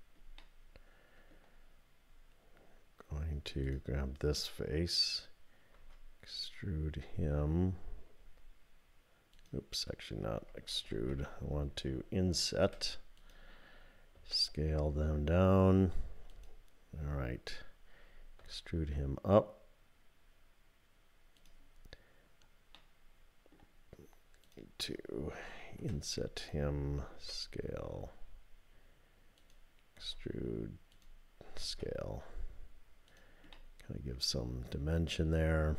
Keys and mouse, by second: 0.5 click, 5.7 e, 10.9 ctrl+z, 12.7 i, 14.1 s, 18.4 e, 22.9 middle click, 24.4 click, 25.8 i, 27.2 s, 29.4-30.9 drag, 30.0 e, 31.6 s, 33.6-35.7 drag.